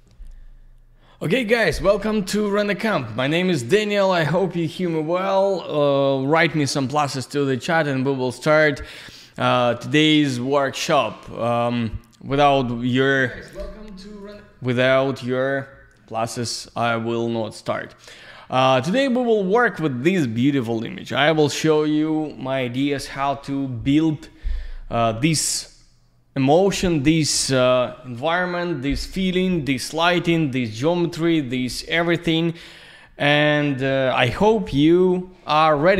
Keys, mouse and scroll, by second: 11.2 click, 14.2 click.